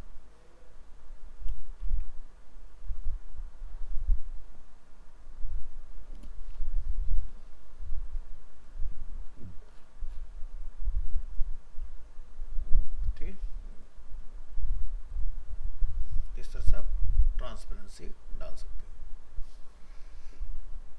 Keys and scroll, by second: 1.5 ctrl+v, 6.5 ctrl+s, 16.5 ctrl+w.